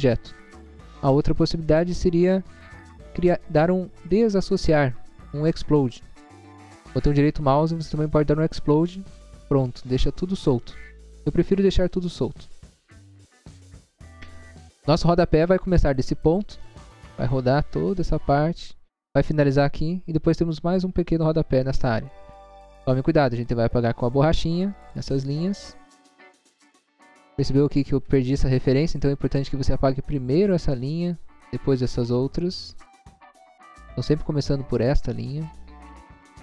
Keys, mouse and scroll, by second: 6.5 right click, 8.6 click, 11.4 middle click, 12.0 middle click, 12.2-12.5 scroll down 1, 12.5 scroll up 1, 12.8 middle click, 13.2 middle click, 13.6 click, 14.1 scroll up 1, 14.7 scroll up 1, 16.3 scroll down 1, 16.9 scroll down 1, 23.2 click, 24.4 click, 24.6 click, 24.9 click, 25.4 click, 25.7 click, 26.0 click, 30.1 click, 31.0 click, 31.4 click, 31.9 click, 32.2 click, 32.6 click, 33.1 click, 33.8 scroll up 1, 34.8 click, 35.2 click.